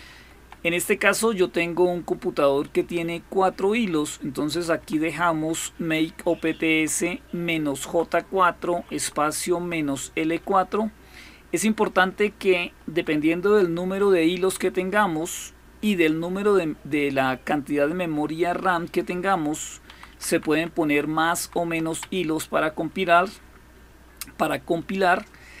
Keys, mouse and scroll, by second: 0.0 Left, 0.2 Left, 0.4 Left, 0.7 Left, 4.3 Left, 4.6 Left, 6.5 Right, 7.7 Right, 7.9 Right, 8.5 Right, 8.8 Right, 9.0 Right, 9.4 Right, 9.6 Right, 10.0 typing, 12.7 Left, 13.0-13.7 typing, 17.5 Down, 17.8 typing, 18.9 typing, 19.7 Up, 20.0 Up, 20.1 Up, 20.3 Up, 21.2 Down, 21.4 Down, 21.7 Down.